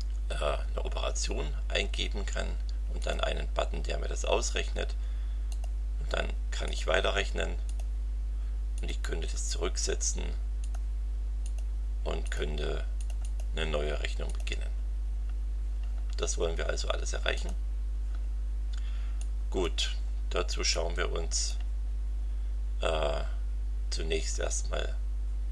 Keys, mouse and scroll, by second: 3.0 click, 5.5 click, 6.6 click, 7.6 click, 8.7 click, 10.6 click, 11.4 click, 12.2 click, 13.0 click, 14.2 click, 17.3 click, 19.2-19.8 drag, 20.7 click.